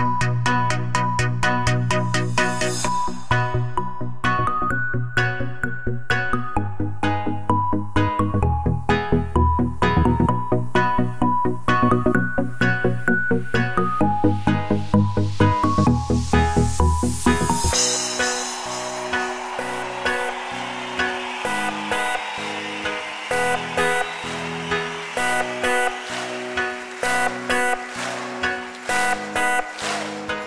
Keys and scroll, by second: 1.0-2.2 typing, 13.7-14.7 typing, 15.8 Return, 22.3-23.4 typing, 24.9-26.6 typing, 28.5-30.4 typing.